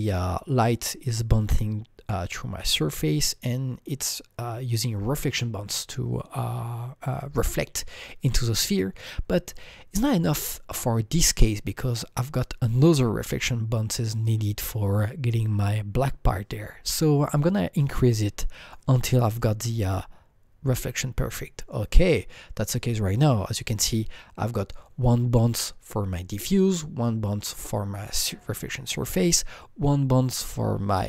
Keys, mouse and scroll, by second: 18.1 scroll up 5, 18.1 click, 22.6-25.3 drag.